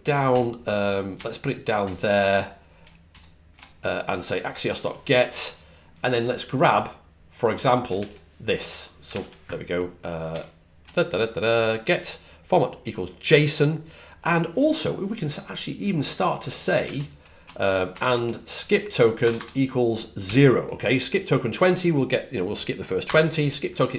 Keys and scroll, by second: 0.2 shift+super+Right, 1.7 ctrl+super+Right, 3.0 ctrl+shift+super+Right, 7.8 super+c, 19.2 BackSpace, 20.1 0, 22.9 Left.